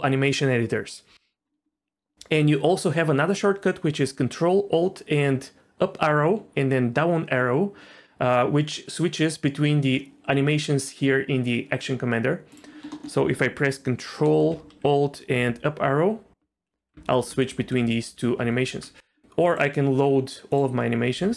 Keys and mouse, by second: 12.9 middle click, 14.2 middle click, 15.3 ctrl+alt+Up, 16.4 ctrl+alt+Down, 16.7 ctrl+alt+Up, 16.9 ctrl+alt+Down, 17.3 ctrl+alt+Up, 17.5 ctrl+alt+Down, 18.3 ctrl+alt+Down, 19.5-21.3 drag.